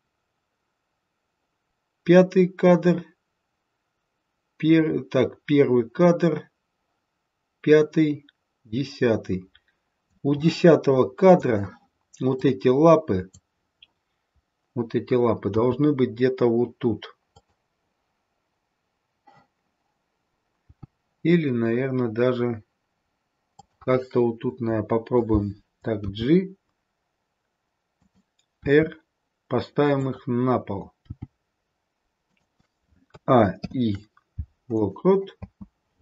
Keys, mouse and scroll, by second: 11.2 click, 12.3 click, 15.6 g, 20.6 g, 25.9 g, 28.6 r, 31.0 g, 33.1 a, 33.6 i, 35.4 space.